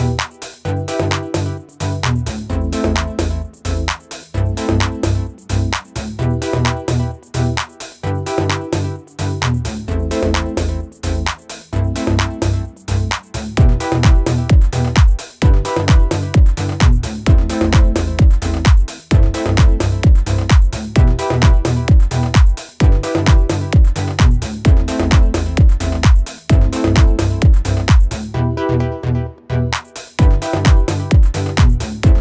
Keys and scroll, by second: 1.0 Escape, 1.6 Escape, 2.4 Escape, 2.7 Escape, 18.2 ctrl+-, 22.7 ctrl+-, 25.9 ctrl+z, 28.2 ctrl+z, 28.3 ctrl+z, 28.4-31.8 ctrl+z.